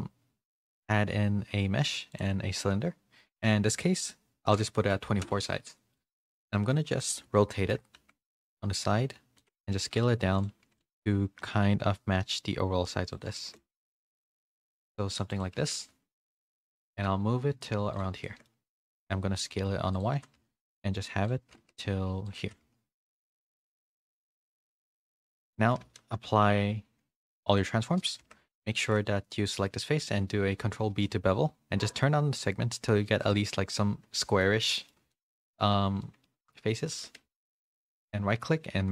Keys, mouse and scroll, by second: 3.2-5.2 drag, 5.7 middle click, 6.7 KP_3, 7.5 shift+middle click, 7.9 r, 9.7 s, 10.5 z, 10.9 shift+middle click, 11.4 g, 13.4 shift+middle click, 13.8 s, 15.6 g, 18.2 shift+middle click, 19.6 s, 20.1 g, 21.4 s, 22.4 g, 24.5 z, 24.8 middle click, 25.8 ctrl+a, 28.2 Tab, 28.4 3, 28.5 click, 28.8 middle click, 30.0 ctrl+b, 34.1 middle click, 34.7 middle click, 35.1 shift+middle click, 36.1 middle click, 36.9 1, 37.2 a.